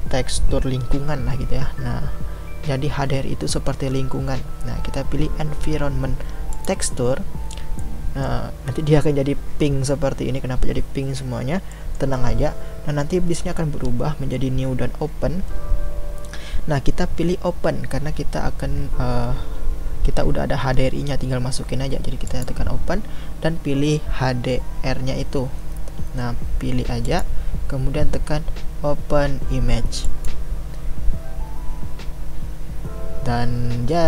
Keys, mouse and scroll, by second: 7.8-22.5 middle drag, 22.5-31.7 drag.